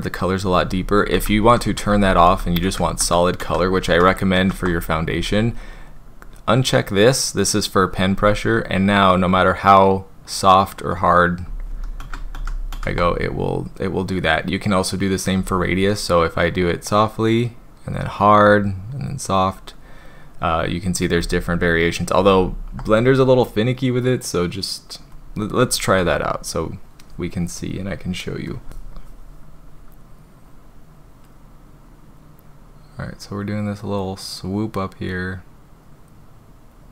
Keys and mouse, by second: 0.8 ctrl+z, 1.1 ctrl+z, 1.4 ctrl+z, 1.7 ctrl+z, 1.9 ctrl+z, 2.3 ctrl+z, 2.6 ctrl+z, 3.0 ctrl+z, 3.4 ctrl+z, 3.9 ctrl+z, 4.4 ctrl+z, 8.5-8.9 drag, 9.4 drag, 10.3 drag, 10.9 drag, 11.7 ctrl+z, 12.0 ctrl+z, 12.3 ctrl+z, 12.7 ctrl+z, 15.3 click, 16.4-19.5 drag, 22.2 ctrl+z, 30.5-31.2 drag, 33.1-34.0 drag, 35.4-36.0 drag.